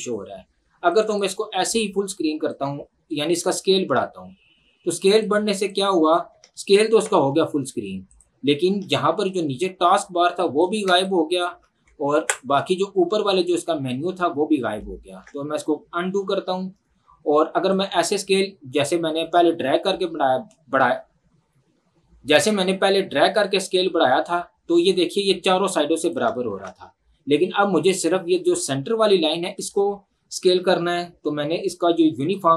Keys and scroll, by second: 7.0 ctrl+1, 12.2 ctrl+1, 15.1 ctrl+z, 26.5 ctrl+z.